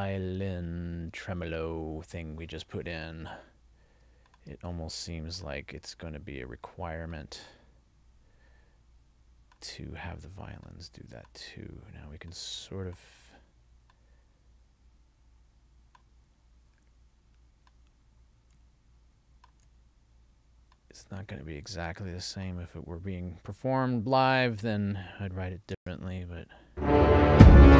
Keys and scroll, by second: 25.8 space.